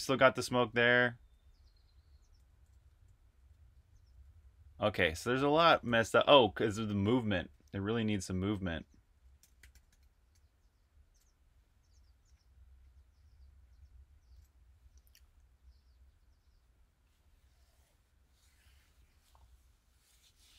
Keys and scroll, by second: 0.0-6.9 typing, 7.7 super+q, 9.0-10.2 typing.